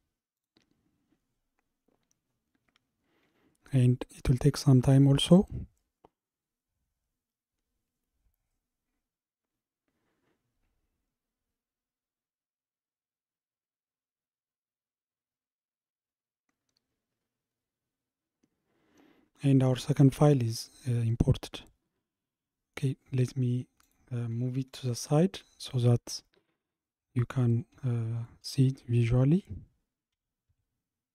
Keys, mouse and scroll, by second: 21.0-21.3 scroll down 1, 21.5-23.9 middle drag, 23.9 click, 24.3-28.2 scroll down 55, 28.2 shift+click, 30.2 g.